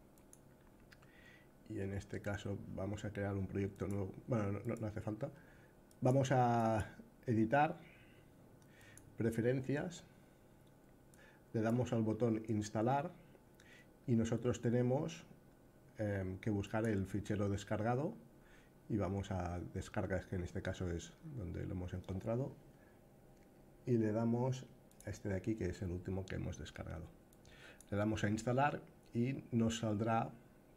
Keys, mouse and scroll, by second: 3.5-5.9 drag, 6.3-8.7 drag.